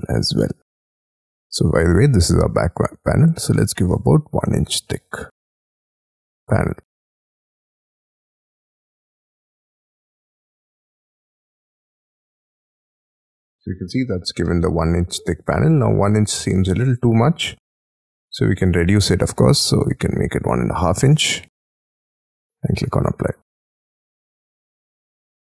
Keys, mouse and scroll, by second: 0.7-1.8 scroll up 18, 3.8 1, 4.6 shift+', 13.2-14.3 scroll down 26, 14.4 middle click, 14.9-15.5 scroll down 9, 15.5-16.0 scroll up 7, 16.0 scroll down 1, 16.4 scroll up 5, 16.5 space, 17.0 m, 18.5 shift+click, 18.7 space, 19.3 shift+click, 20.4-21.3 typing.